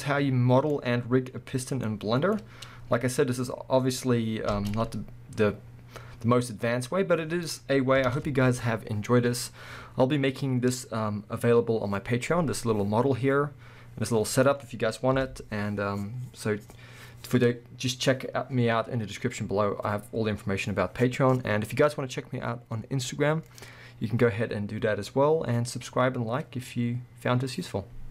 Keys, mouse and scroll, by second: 0.7 scroll up 2, 4.6 space, 4.7-6.3 middle drag, 6.9-8.0 middle drag, 8.0 KP_1, 12.6-13.7 middle drag, 14.0-18.9 middle drag, 15.2 KP_1, 19.2-28.1 middle drag.